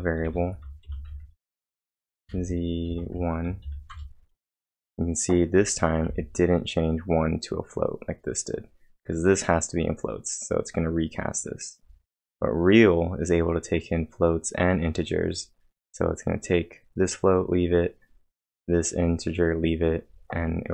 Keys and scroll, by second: 0.0-1.1 typing, 1.0 Return, 2.2 ,, 2.3 space, 2.9 1, 3.6 shift+0, 3.9 Return.